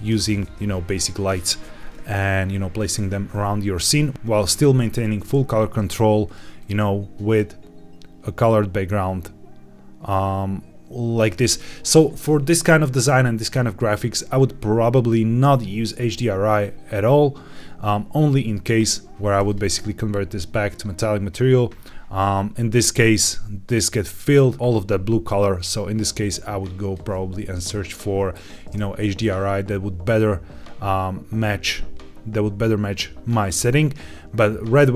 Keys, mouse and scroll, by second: 1.7-2.8 scroll up 2, 5.6 click, 6.5 click, 19.4 click, 20.6 click, 25.5-26.9 drag.